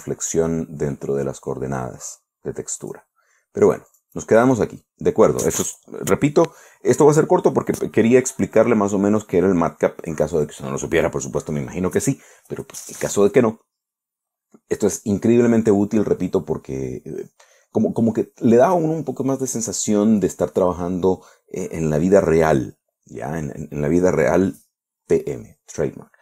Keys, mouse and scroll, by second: 1.8 scroll up 1, 3.3 click, 4.4 click.